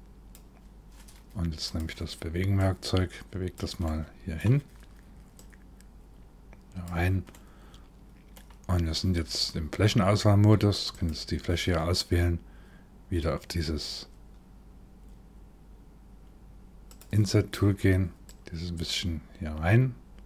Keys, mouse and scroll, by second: 1.3 click, 2.2 click, 3.4 middle click, 5.0 click, 6.9 middle click, 8.5-9.8 scroll up 1, 9.8-10.5 scroll up 2, 10.5 click, 16.5 click, 17.9 click.